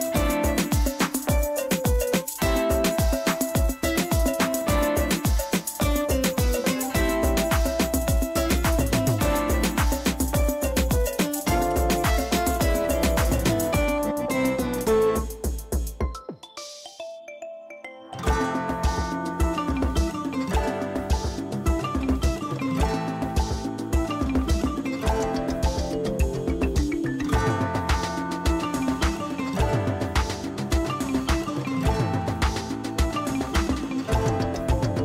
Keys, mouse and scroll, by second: 6.4 alt+click, 6.8 click, 9.5 alt+click, 10.1 click, 11.8 ctrl+alt+z, 13.1 b, 14.3 alt+click, 15.2-19.0 typing, 16.6 click, 19.7-20.1 click, 22.2 ctrl+d, 23.4-25.5 typing, 25.1 click, 26.0 click, 32.6 ctrl+e, 33.1 space, 33.3 right click, 33.5 click.